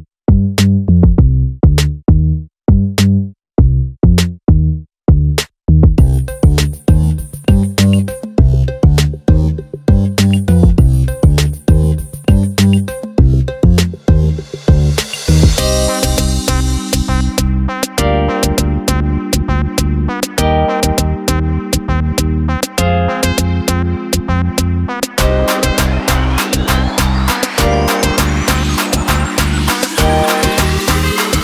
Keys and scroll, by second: 26.0 ctrl+c.